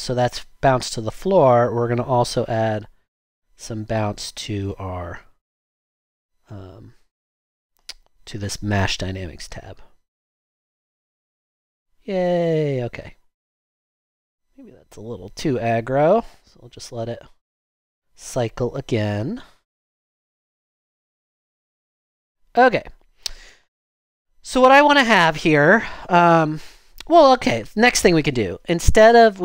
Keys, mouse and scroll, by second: 9.1 typing.